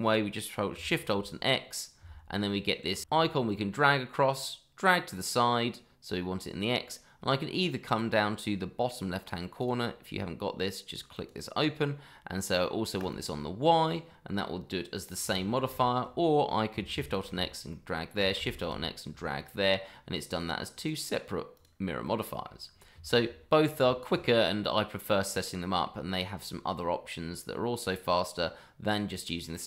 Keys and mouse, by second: 2.0 alt+shift+x, 9.6 click, 11.1 click, 15.6 ctrl+z, 17.0 alt+shift+x, 17.7 middle drag, 20.7 click, 22.0-22.4 middle drag, 23.0 shift+middle drag, 23.9 shift+middle drag, 28.8 click.